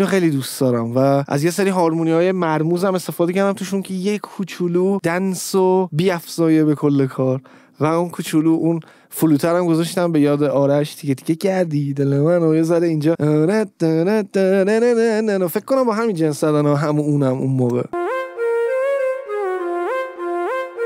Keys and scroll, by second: 17.9 space.